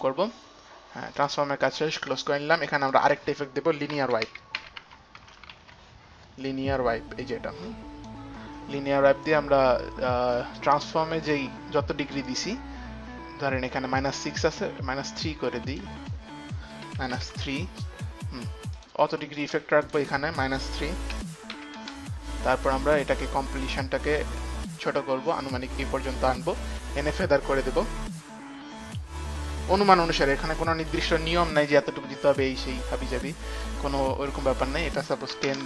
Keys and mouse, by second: 3.1 click, 3.9-6.3 typing, 7.5 click, 10.2 click, 11.4 click, 12.5 click, 14.2 click, 15.7 click, 15.9 click, 17.1 KP_Subtract, 17.1 click, 17.3 KP_3, 17.6 Return, 19.0 KP_Subtract, 19.0 Return, 19.0 click, 19.0 KP_3, 21.5 KP_Subtract, 21.8 KP_3, 22.0 Return, 23.5 click, 28.0 click, 34.5 click, 35.6 KP_1.